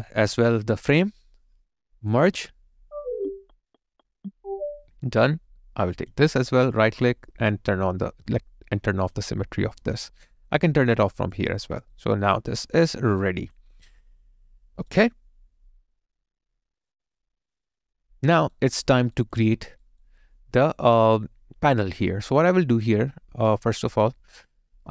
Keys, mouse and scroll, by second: 6.5 right click, 11.8 alt+right click, 12.2 alt+click, 12.7 alt+middle click, 13.1 alt+click, 13.8 alt+right click, 18.3 alt+right click, 19.4 alt+click, 19.8 alt+right click.